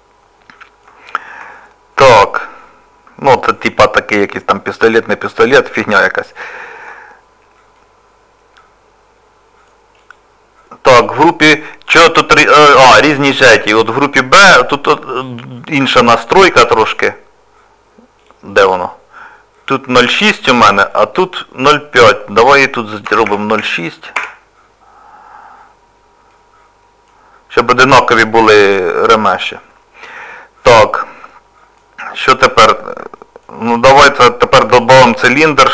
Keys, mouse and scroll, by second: 2.3 middle click, 4.0 scroll down 2, 4.4 scroll up 1, 4.4 middle click, 5.5 middle click, 6.6 shift+middle click, 6.6 shift+middle click, 6.9 scroll down 2, 7.2 scroll down 1, 7.8 middle click, 7.8 scroll up 2, 10.0 click, 12.3 middle click, 13.9 click, 16.2 click, 26.4 middle click, 28.4 middle click, 32.3 middle click, 32.9 scroll down 1, 33.2 shift+middle click, 33.7 middle click, 34.8 scroll down 1.